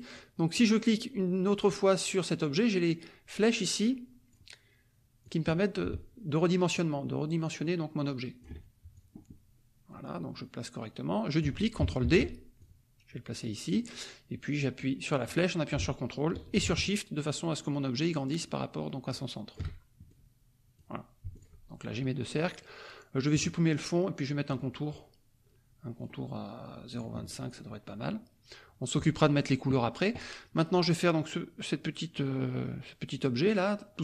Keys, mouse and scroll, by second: 0.6 click, 3.8 click, 5.2 click, 7.7 ctrl+click, 8.9-11.6 ctrl+drag, 12.0 ctrl+d, 12.6-13.8 ctrl+drag, 15.3-19.7 drag, 20.0 ctrl+shift+click, 21.3 shift+click, 23.3 click, 24.5 click, 24.7 middle click, 25.9 right click, 26.9 click, 27.2 click, 27.5 middle click.